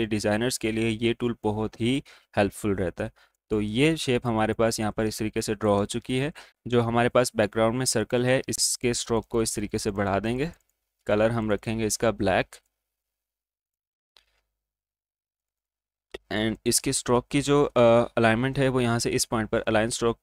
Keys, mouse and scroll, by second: 1.0-2.8 alt+drag, 2.8-3.7 alt+scroll down 1, 3.7 space, 4.9 click, 5.9 space, 6.5 click, 8.5 click.